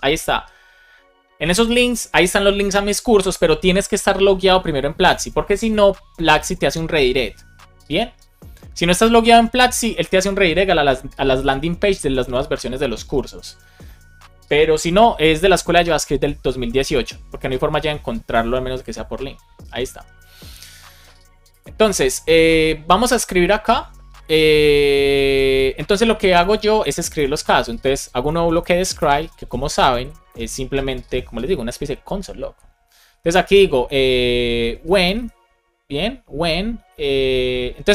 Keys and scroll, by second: 27.1 BackSpace, 29.1 shift+9, 29.5 shift+', 29.7 shift+space, 33.4 BackSpace, 36.4 space.